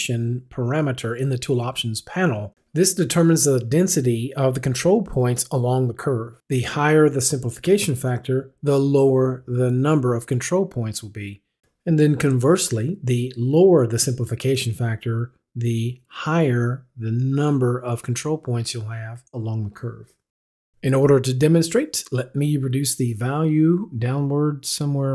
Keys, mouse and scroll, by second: 2.6 click, 22.0 click.